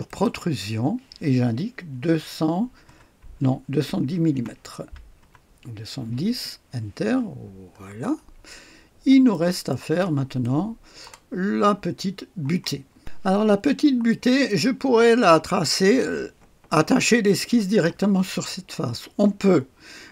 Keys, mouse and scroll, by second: 0.0 click, 1.9 KP_2, 2.8 KP_0, 4.7 KP_1, 5.1 KP_0, 6.3 Return, 7.2-8.4 scroll down 1, 8.4-9.6 drag, 10.1 click, 10.1 typing, 10.2 click, 10.4 middle click, 10.4 right click, 12.9 click, 13.5-14.0 scroll up 1, 14.0 right click, 17.6 click.